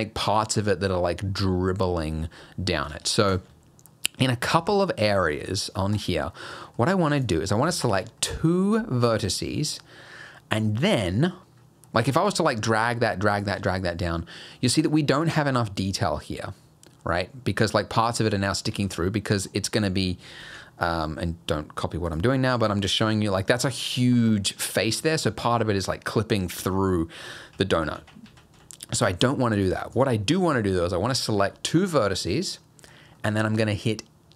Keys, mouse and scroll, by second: 3.8-4.4 scroll up 2, 3.9 middle click, 4.4 Tab, 4.9 middle click, 5.9 click, 6.3 middle click, 7.2 click, 7.8 shift+click, 8.2 middle click, 9.6 middle click, 10.4 middle click, 11.2 middle click, 11.6-11.9 scroll up 1, 11.9 middle click, 12.3 g, 13.6 Tab, 14.3 middle click, 17.0 middle click, 18.7 Tab, 19.3 middle click, 20.4 alt+h, 20.8 middle click, 22.1 click, 25.5 middle click, 26.1 middle click, 26.7 middle click, 27.5 ctrl+z, 27.8 ctrl+z, 28.0 ctrl+z, 28.3 ctrl+z, 28.6 ctrl+z, 29.6 click, 29.9 shift+click, 30.3 shift+middle click, 30.7 middle click, 32.1 middle click, 33.2 middle click.